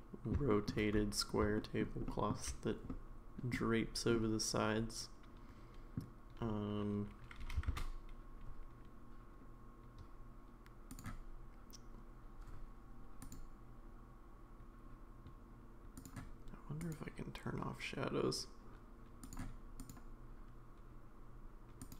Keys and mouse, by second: 0.0 middle click, 0.5 shift+middle drag, 1.6 shift+middle drag, 2.1 shift+middle drag, 2.9-3.5 middle drag, 4.1-6.0 middle drag, 7.4 g, 13.4 click, 17.0 click, 19.8 click.